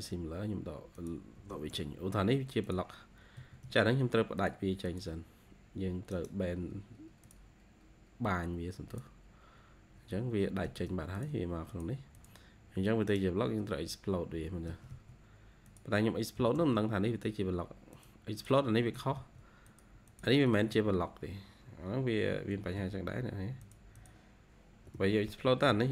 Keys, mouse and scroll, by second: 1.3 e, 1.8 scroll down 1, 2.0 e, 3.3 Escape, 3.5 Escape, 4.7 double click, 6.0 right click, 9.9 scroll down 1, 10.5 Escape, 10.8 Escape, 11.6 double click, 12.0 double click, 12.6-13.0 scroll up 2, 13.0 right click, 14.6 Escape, 14.8 Escape, 16.3 x, 16.9 scroll up 1, 17.2 x, 18.3 double click, 18.8 Escape, 19.1 Escape, 20.0 double click, 20.4 Escape, 20.6 Escape, 20.8 scroll down 2, 22.5 ctrl+z, 23.9 double click, 24.5 scroll up 1, 24.8 Escape, 25.6 ctrl+z.